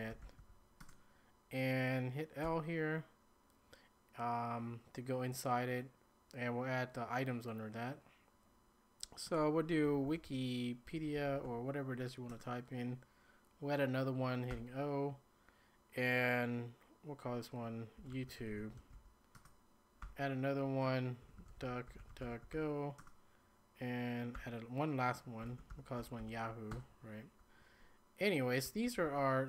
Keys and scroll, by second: 0.0-0.9 typing, 2.2-2.9 typing, 9.5-11.9 typing, 12.3 Return, 14.3-15.0 typing, 17.8-20.0 typing, 21.1-23.0 typing, 24.3-26.7 typing, 28.4-29.4 typing.